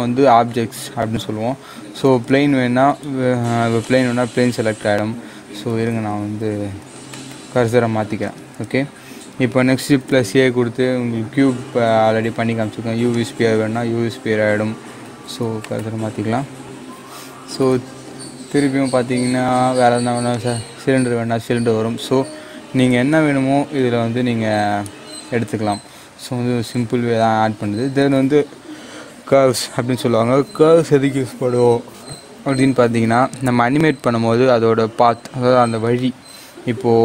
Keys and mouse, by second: 3.8 click, 7.0 shift+right click, 9.8 shift+a, 13.0 click, 15.5 shift+right click, 17.5 shift+a, 20.3 click, 22.8 click, 23.0 shift+a.